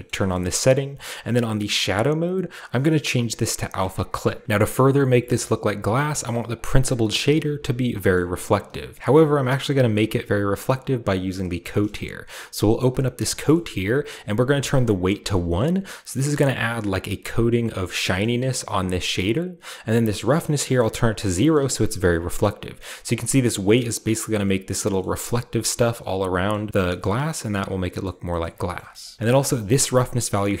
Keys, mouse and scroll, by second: 0.0 shift+middle click, 0.1 shift+scroll up 1, 0.3-2.5 shift+middle drag, 2.6-4.4 drag, 4.4 ctrl+z, 4.6-6.4 shift+middle drag, 4.6-6.2 shift+scroll up 1, 6.4 scroll up 1, 6.4 typing, 6.5 drag, 6.8 click, 8.9 click, 9.5-11.3 shift+middle drag, 11.6-13.0 shift+middle drag, 12.8-17.9 drag, 13.3-14.3 scroll down 1, 14.3-14.8 scroll down 1, 14.5 middle click, 16.1-17.9 middle drag, 17.9-20.1 scroll down 1, 18.2-20.1 middle drag, 20.7-25.8 drag, 21.3-24.1 shift+middle drag, 21.7-22.8 shift+scroll up 1, 22.8-24.1 scroll up 1, 24.3-24.9 scroll down 2, 24.4-26.8 middle drag, 24.9-25.8 scroll up 2, 26.5-27.0 scroll down 2, 27.0-27.5 middle drag, 27.0-28.0 scroll up 1, 28.0 middle drag, 28.4 middle click, 28.7 middle click, 29.0-30.6 shift+middle drag, 29.2 scroll down 1, 29.3-30.6 scroll up 1.